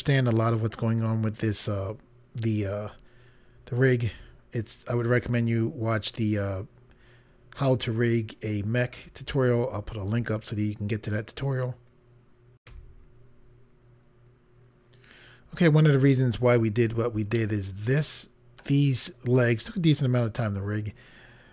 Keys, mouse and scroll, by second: 12.6 Pause, 17.3 middle click, 21.0 click.